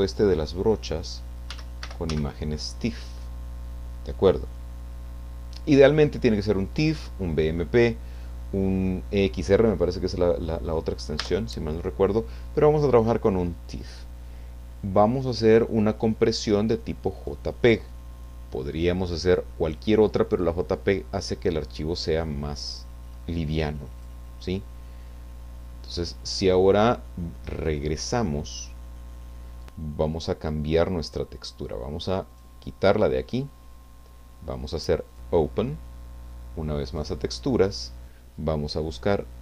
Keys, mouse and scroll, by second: 1.2-2.6 typing, 11.2 Return, 17.3-19.1 drag, 24.0 click, 27.9 click, 32.3 click, 35.1 click, 36.8 click, 38.7-39.3 scroll down 1.